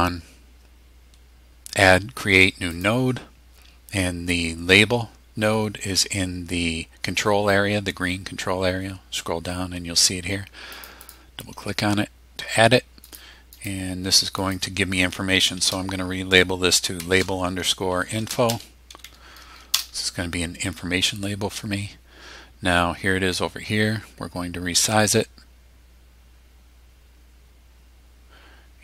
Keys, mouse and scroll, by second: 2.7 click, 10.7 click, 13.1 click, 13.5 click, 14.4 click, 17.0-19.5 typing, 19.7 Return, 24.9-28.8 drag.